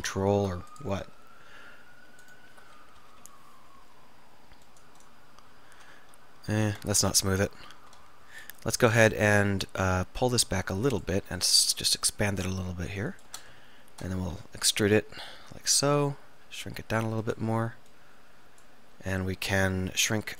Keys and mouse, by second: 0.1 alt+m, 2.3 click, 3.1 KP_1, 3.3 KP_3, 6.7 ctrl+z, 8.5 KP_1, 8.9 KP_3, 11.5 s, 13.3-15.0 drag, 14.4 e, 16.5 e, 16.6 s, 17.4 click.